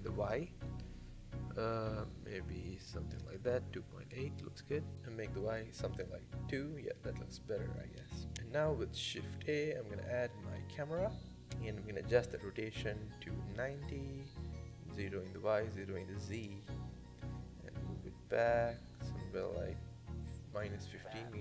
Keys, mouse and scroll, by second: 1.3-2.5 drag, 2.5-3.7 middle drag, 3.7-4.9 drag, 4.9 middle click, 5.0 click, 5.8-6.9 middle drag, 6.9 scroll down 5, 7.1-8.3 middle drag, 8.3 scroll down 2, 8.4 middle click, 9.1 shift+a, 10.6-11.2 middle drag, 11.2-11.5 scroll up 4, 11.5 shift+middle click, 12.3-15.8 drag, 15.8-17.8 middle drag, 19.0-21.2 drag, 21.2 KP_0.